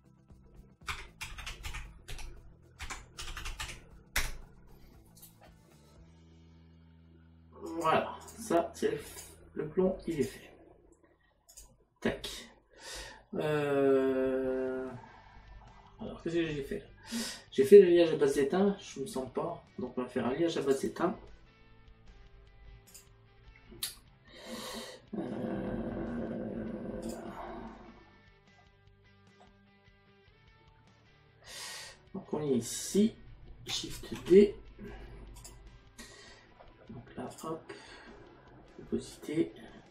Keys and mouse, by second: 0.9 KP_Decimal, 4.2 Tab, 7.7 click, 11.5 click, 20.6 click, 22.9 click, 27.1 click, 28.6 middle click, 32.9 click, 35.4 click, 37.4 click, 39.2 click.